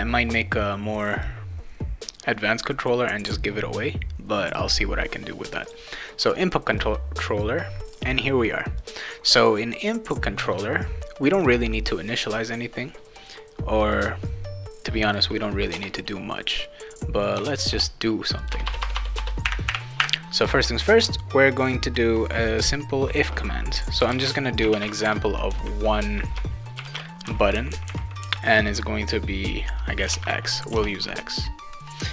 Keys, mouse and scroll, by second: 1.2 click, 4.4 click, 5.6 click, 6.8-8.0 drag, 8.8-10.4 drag, 11.4 click, 13.9-15.1 drag, 15.7 BackSpace, 16.6 click, 17.3 BackSpace, 17.7 BackSpace, 18.4 click, 18.5 Return, 18.6 Return, 18.8 Return, 18.9 Return, 19.2 Return, 23.7-25.2 typing, 26.8 shift+[, 26.8 shift+], 30.0 x, 30.7 BackSpace.